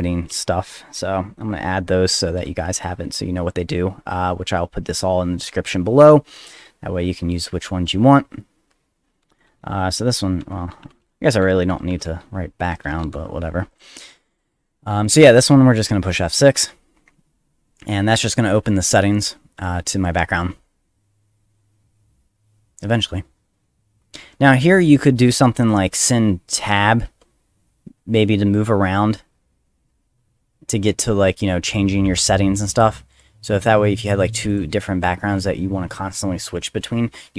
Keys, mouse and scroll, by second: 0.3 space, 2.4 ;, 10.2-13.0 typing, 13.7 click, 14.3 click, 15.0 click, 16.5 F6, 26.6 Tab, 27.0 Tab, 33.1 click, 34.0 click, 34.5 click.